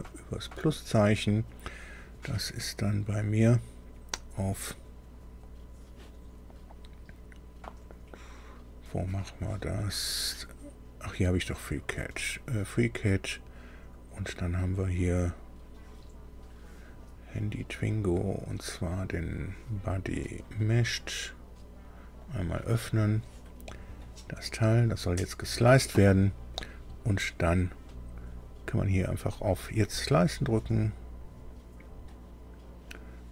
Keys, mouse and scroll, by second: 9.9 click, 11.5 click, 16.8 click, 20.6 click, 22.2 click, 24.2-24.5 scroll up 2, 24.8 scroll down 2, 29.1 click.